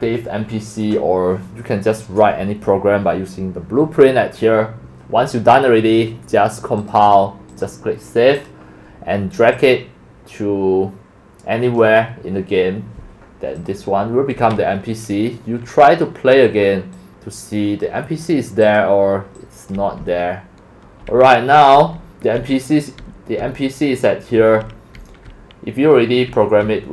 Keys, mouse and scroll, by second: 1.3 scroll down 3, 1.4-2.0 scroll, 6.8 right click, 6.9 click, 7.5 click, 8.3 click, 8.5 click, 11.8 click, 16.2 click, 17.2-18.2 drag, 18.6 click, 19.3 click, 19.6-21.8 typing, 23.0 d, 24.4-26.9 typing.